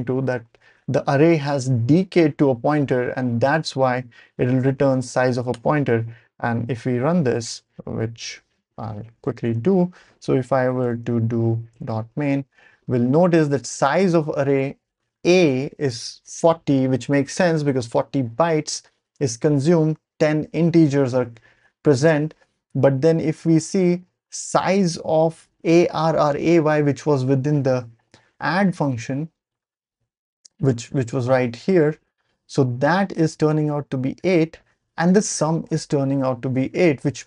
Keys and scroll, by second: 2.2 BackSpace, 8.3 ctrl+alt+super+p, 9.4 ctrl+l, 10.2-11.3 typing, 11.7 Return.